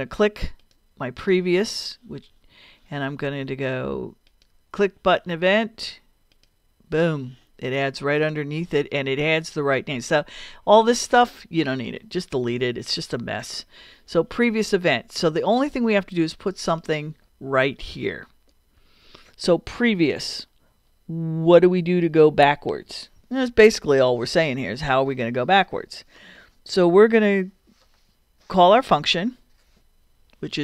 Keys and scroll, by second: 12.5 BackSpace, 18.8 BackSpace.